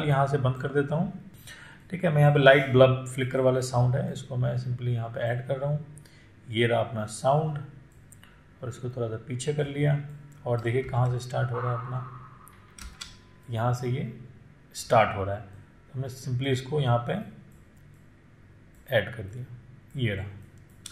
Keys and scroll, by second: 11.1 space.